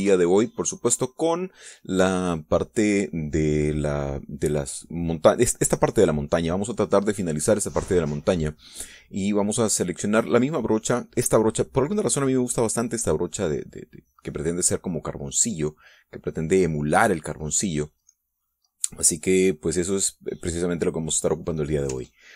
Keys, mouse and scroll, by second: 0.5 ctrl+z, 10.9 click.